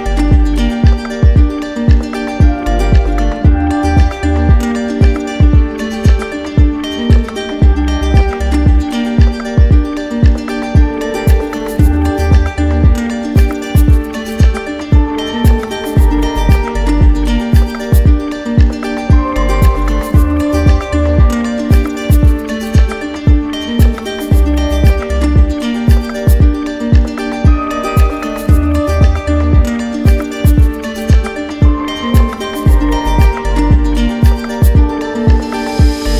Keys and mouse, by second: 0.0 click, 2.3-4.3 drag, 14.1-15.1 drag, 17.0 click, 17.5 ctrl+z, 24.0-25.0 drag, 30.0-31.1 drag, 31.7-32.7 drag, 35.0 z, 35.9-36.1 drag.